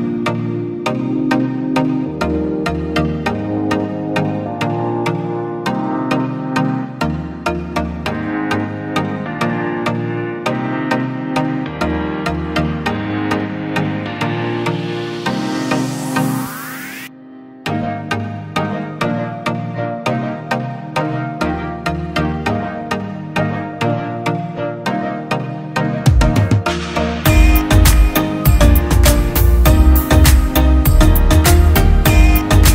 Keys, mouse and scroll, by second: 1.7 alt+shift+click, 3.6 Return, 6.2 ctrl+-, 7.1 ctrl+t, 7.7 ctrl+t, 7.9 ctrl+t, 8.5 alt+shift+click, 17.2 Return, 19.5 ctrl+t, 20.7 Return.